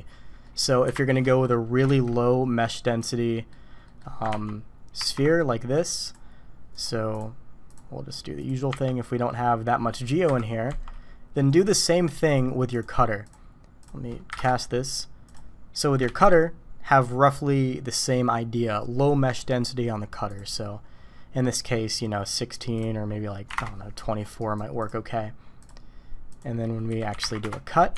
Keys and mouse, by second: 0.5 click, 0.9 Delete, 1.3 click, 1.9 shift+a, 3.3 drag, 3.8 click, 4.3 ctrl+2, 5.0 ctrl+3, 6.0 click, 8.4 click, 8.7 Tab, 9.0 drag, 10.3 KP_1, 10.7 Tab, 12.8-14.9 drag, 16.1 shift+a, 22.9-24.1 drag, 24.4 click, 26.3 click, 26.9 r.